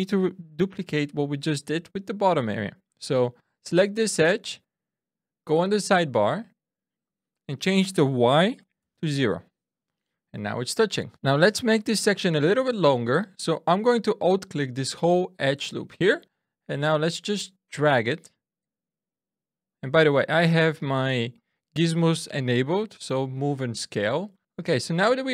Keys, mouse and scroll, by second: 0.6 click, 7.0 click, 10.9 shift+middle click, 17.4 click, 21.3 click.